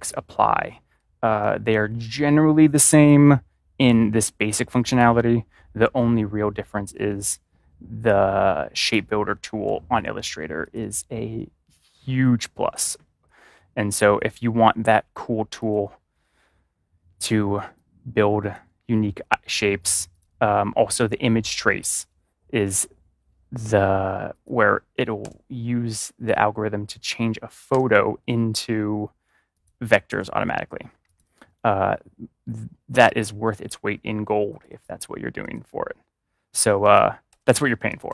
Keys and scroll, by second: 25.1 BackSpace, 27.6 BackSpace, 30.0 BackSpace, 31.2 BackSpace, 33.4 BackSpace, 34.6 BackSpace, 35.6 BackSpace, 37.2-38.0 typing.